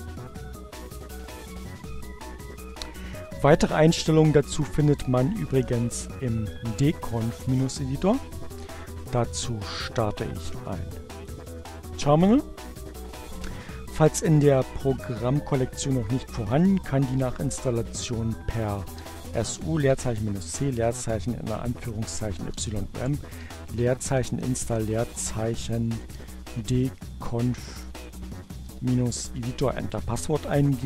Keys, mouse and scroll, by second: 0.0 ctrl+alt+w, 7.5 click, 11.4 click, 16.6-17.5 typing, 18.8-28.6 typing.